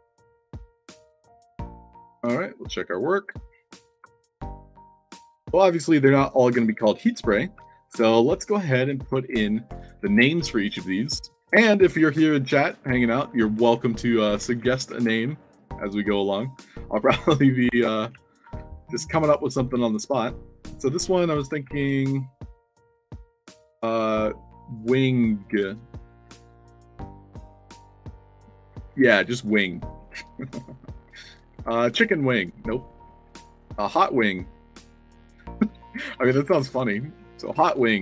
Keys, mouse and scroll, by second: 0.7 Tab, 2.0 d, 4.3-7.5 typing, 9.6 Tab, 13.9 alt+click, 14.2-15.5 typing, 17.1 click, 18.0 a, 18.5 s, 19.1 middle click, 20.4 click, 27.2 shift+w, 27.4 i, 28.8 Caps_Lock, 29.4 Caps_Lock, 30.0 shift+w, 30.3 i, 31.5 Caps_Lock, 32.6-33.5 typing, 37.0-38.0 typing.